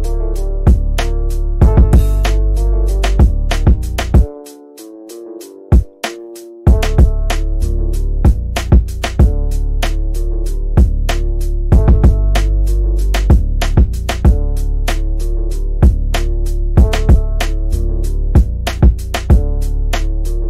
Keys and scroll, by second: 3.7 c, 6.8-8.3 typing, 12.2 shift+Home, 12.8 v, 14.8 c, 15.4 e, 15.6 Escape, 18.8 c, 19.4 F3, 19.7 Escape.